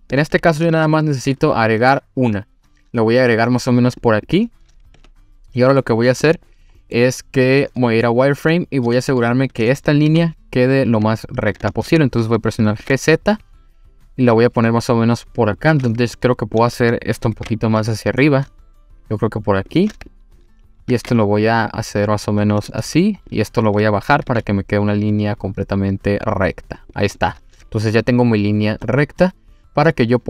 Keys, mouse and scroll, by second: 0.7 ctrl+r, 4.0 click, 4.3 click, 5.0 1, 6.3 click, 6.8 middle click, 7.6 click, 8.5 click, 10.1 g, 11.5 click, 11.7 ctrl+z, 12.7 g, 12.8 z, 15.5 click, 16.0 click, 17.3 g, 19.7 click, 20.1 click, 20.9 g, 21.0 z, 22.6 click, 23.3 click, 24.2 g, 24.3 z, 26.8 click, 27.0 click, 27.8 click, 28.8-30.2 middle drag.